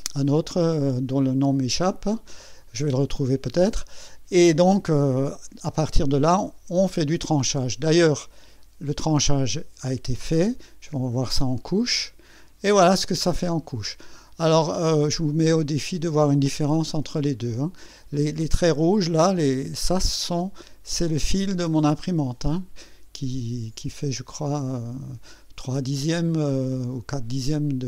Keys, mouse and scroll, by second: 9.9 click, 11.2 click.